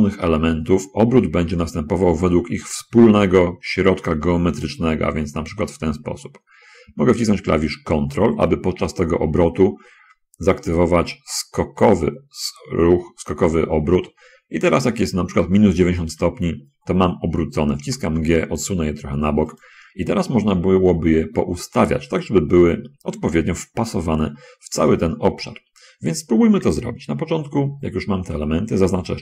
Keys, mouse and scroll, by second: 1.6 r, 16.4 ctrl+click, 18.1 g, 19.6 click.